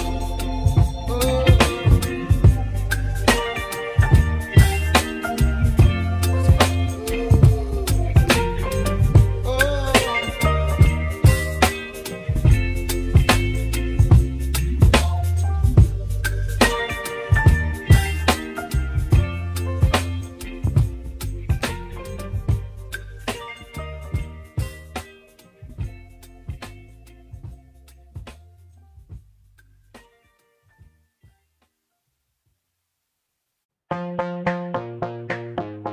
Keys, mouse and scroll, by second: 17.4 Tab, 18.4 g, 24.0-24.7 drag, 24.7-32.2 middle drag, 32.2-32.7 scroll down 1, 32.7-33.3 scroll up 1, 33.3-34.3 shift+middle drag, 34.3-34.8 scroll down 1, 34.8-35.8 shift+middle drag, 35.8 scroll down 1.